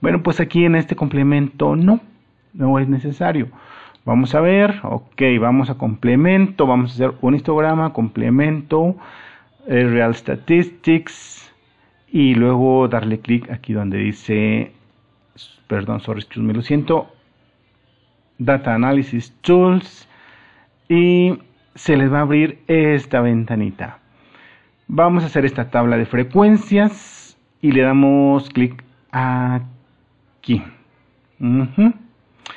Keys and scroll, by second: 7.1 super+Delete, 21.4 super+-.